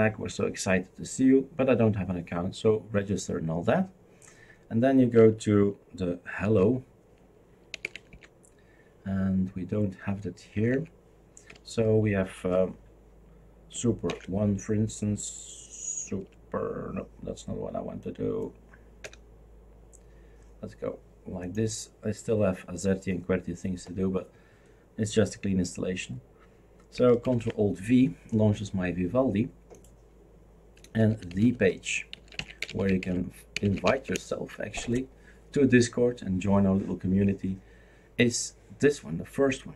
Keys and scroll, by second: 6.4 shift+super+d, 7.5-8.6 typing, 10.5 Escape, 10.7 Escape, 14.1 super+&, 16.3 super+space, 19.0 BackSpace, 27.2 ctrl+alt+v, 30.6-34.3 typing.